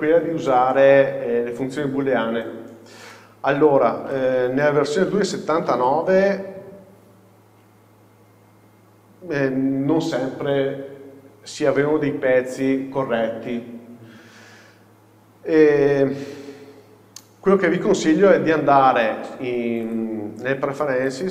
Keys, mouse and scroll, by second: 2.8-3.2 scroll down 1, 3.2 shift+middle click, 6.9-19.9 middle drag, 6.9 scroll up 1, 19.9-21.3 drag.